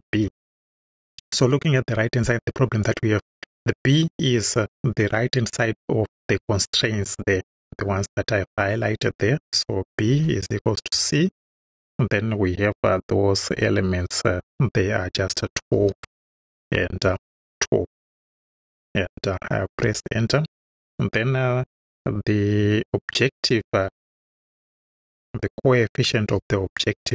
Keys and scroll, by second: 0.1 =, 10.1 c, 10.9 shift+c, 11.4 shift+9, 15.8-17.8 typing, 18.5 Right, 19.7 Return, 24.6 o, 24.9 b, 26.4 j.